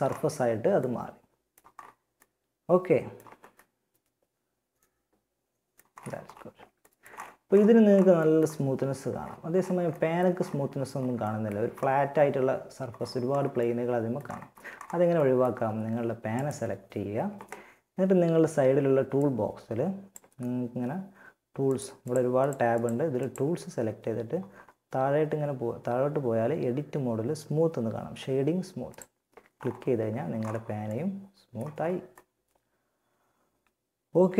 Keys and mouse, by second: 4.2 click, 15.6-17.3 right drag, 18.4-20.3 drag, 20.9-22.3 drag, 28.1-29.3 drag, 29.3 a.